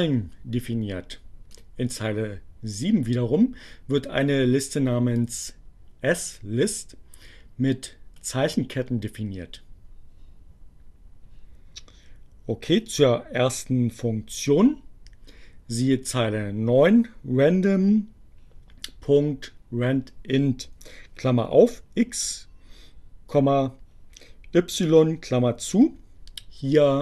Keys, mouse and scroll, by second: 1.6 click.